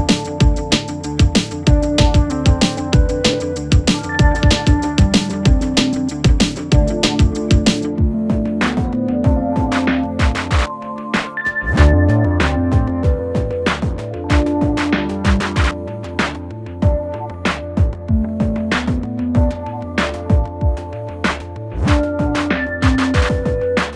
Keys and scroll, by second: 4.4 Escape, 7.5 4, 7.8 3, 8.6 ], 20.4 ].